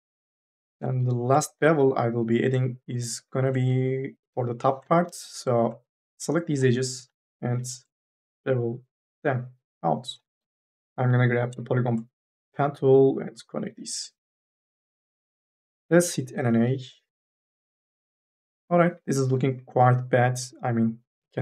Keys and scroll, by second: 0.5 2, 0.8 3, 4.0 2, 4.2 3, 6.0 2, 7.3 m, 7.5 s, 10.3 ctrl+z, 10.5 e, 10.9 m, 11.3 e, 14.4 4, 16.2 n, 16.6 a.